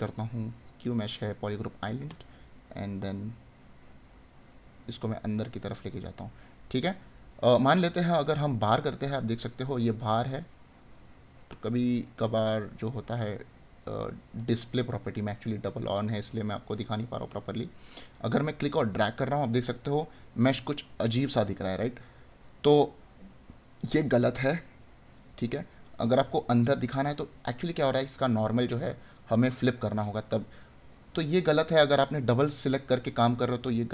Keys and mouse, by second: 2.6 right click, 6.6 right click, 8.4 right click, 10.5 right click, 16.8 right click, 21.9 right click, 24.6 right click, 29.1 right click, 33.8 right click.